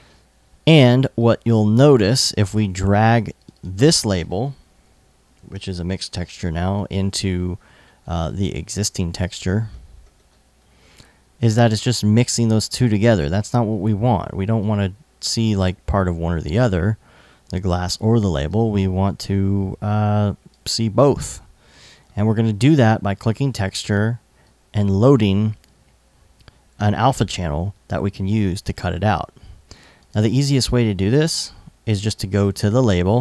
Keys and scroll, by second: 4.2-5.5 typing.